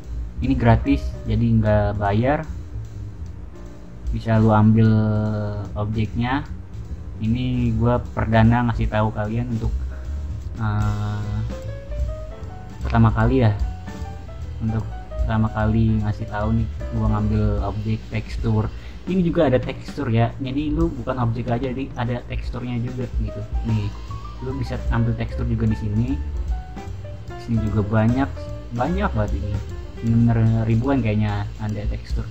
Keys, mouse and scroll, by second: 0.9-4.5 scroll down 2, 4.5-6.1 scroll down 1, 6.3-7.2 scroll down 2, 7.2 scroll down 1, 7.4-9.6 scroll up 2, 9.6-10.8 scroll up 1, 10.8 scroll up 1, 11.0 scroll down 2, 11.1-14.7 middle drag, 16.5 middle click, 16.8-18.0 scroll down 1, 18.0-18.8 scroll down 1, 19.5-21.9 drag, 23.7 click, 26.3-26.8 scroll down 2, 28.1-31.4 scroll down 3, 31.4-32.3 scroll down 1.